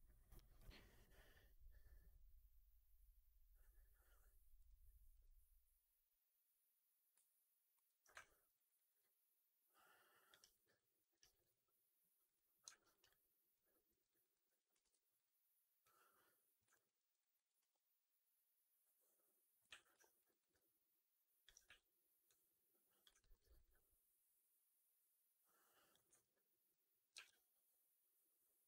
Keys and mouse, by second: 4.5 middle click, 7.7 alt+middle click, 8.1 alt+middle drag, 8.4 alt+right drag, 8.6 alt+drag, 8.9-10.2 alt+drag, 10.3 alt+right drag, 10.5 alt+right click, 10.9 alt+middle drag, 11.1 alt+right drag, 11.3 alt+click, 12.1 middle click, 12.6 alt+right drag, 12.8 alt+right click, 13.0 alt+click, 13.8 alt+middle click, 14.0 alt+right drag, 14.2 alt+click, 14.7 ctrl+d, 15.7 click, 16.6 alt+click, 16.8 alt+middle click, 17.1 right click, 17.5 r, 17.7-19.5 middle drag, 19.5 f, 20.1 alt+right click, 20.3 alt+right click, 20.4 alt+click, 21.5 w, 22.2 click, 23.1 middle drag, 23.2 right click, 23.4 right click, 23.7-25.8 alt+drag, 26.0 1, 27.0 r.